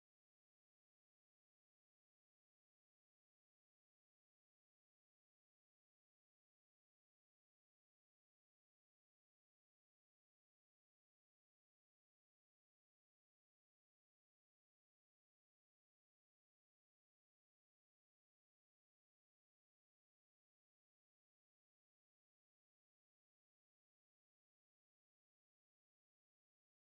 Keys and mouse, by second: 0.6-2.2 right drag, 1.5 b, 4.4-6.8 drag, 5.9 x, 8.9-10.6 right drag, 9.4 l, 12.7 l, 14.8-21.2 drag, 15.4-21.2 right drag, 21.2 Tab, 21.8 KP_Divide, 22.5 a, 24.3 z, 24.6 KP_Divide, 25.4-26.8 middle drag, 26.6 z.